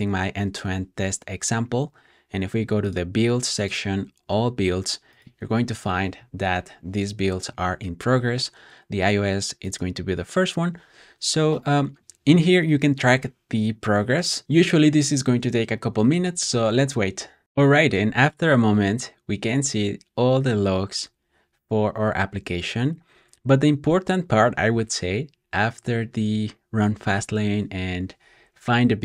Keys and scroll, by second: 17.4 typing, 18.9 typing, 21.0 typing.